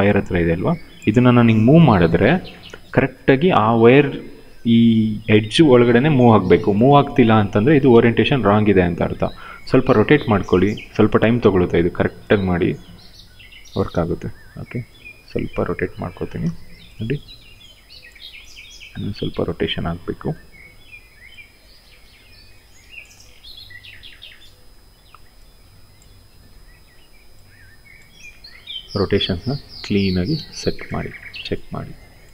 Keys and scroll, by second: 7.6 ctrl+z, 8.6 e, 11.1 w, 13.6 ctrl+z, 14.1 e, 16.1 w, 18.6 e, 20.1 w, 27.8 e, 30.1 w.